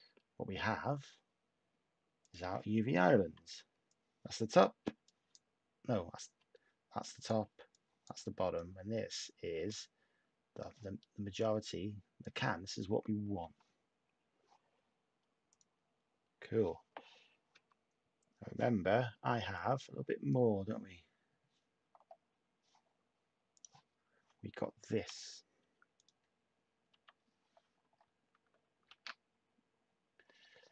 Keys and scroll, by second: 3.5 /, 4.8 /, 6.3 /, 8.2 typing, 17.5 \, 25.5 /, 26.9 ], 28.8 a.